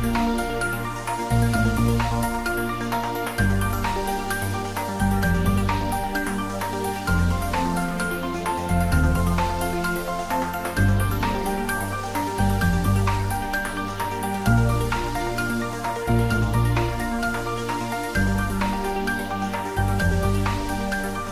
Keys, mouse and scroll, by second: 2.5 click, 3.8 g, 10.1 click, 11.1 g, 11.2 middle click, 11.7-12.0 g, 12.5 g, 12.7 g, 18.5 click, 19.5 g, 20.3 Up.